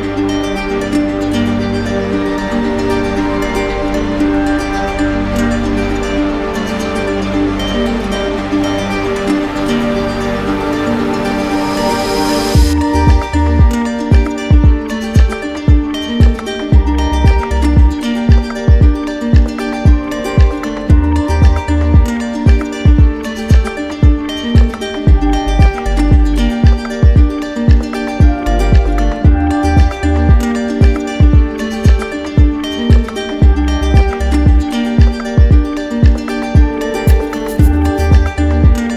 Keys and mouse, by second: 0.6 click, 1.2 shift+click, 6.0 click, 8.2 click, 9.1 click, 9.6 shift+click, 10.9 alt+click, 15.5 click, 18.2 click, 18.9 shift+click, 19.4 ctrl+z, 21.7 click, 28.4 click, 29.8 click, 30.6 alt+click, 31.7 d, 38.8 click.